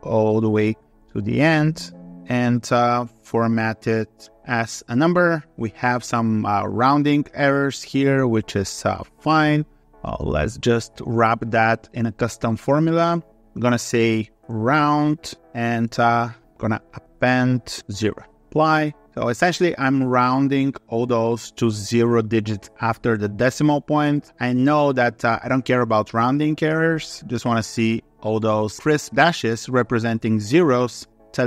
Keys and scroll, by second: 0.0 ctrl+r, 1.3 alt+2, 1.5 3.